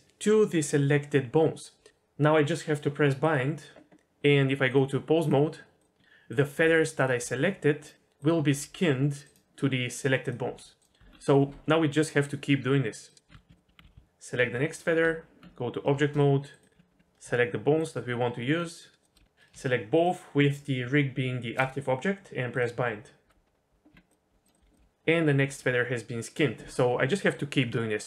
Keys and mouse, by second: 3.2-3.7 drag, 4.8-5.3 drag, 5.8 drag, 6.0 r, 6.3 click, 6.6 r, 7.0 click, 7.2 r, 8.2 click, 8.5 r, 9.2-10.4 drag, 10.4 r, 11.0 Tab, 13.1 click, 13.3 Tab, 13.5 Tab, 13.5 alt+a, 13.7 Tab, 13.9 l, 14.4 l, 15.0 Tab, 16.7 Tab, 16.9 Tab, 18.5 shift+click, 19.9 shift+click, 23.9 Tab, 24.3 r, 24.6 r, 24.8 r, 25.5 r, 26.3-28.0 drag.